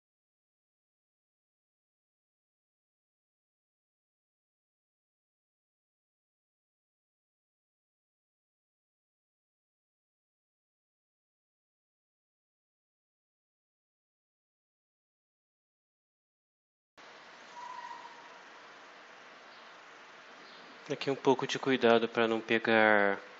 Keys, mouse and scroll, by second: 1.5 click, 2.1 click, 4.6 click, 4.9-5.8 typing, 6.2 click, 8.7 click, 9.4 click, 9.6-10.5 typing, 10.4 click, 11.8 click, 13.2 click.